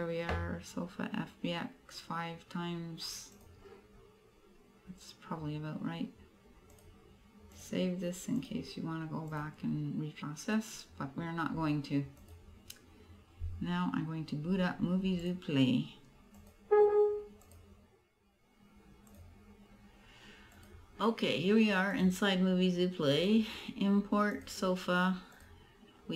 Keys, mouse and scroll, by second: 4.8 click, 6.8 click, 8.4 click.